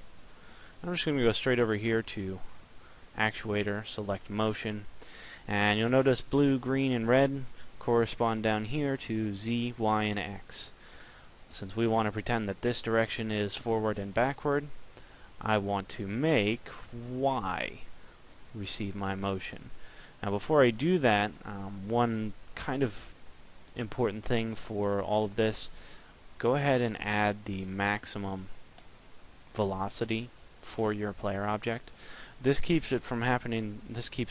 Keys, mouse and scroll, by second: 28.9 click.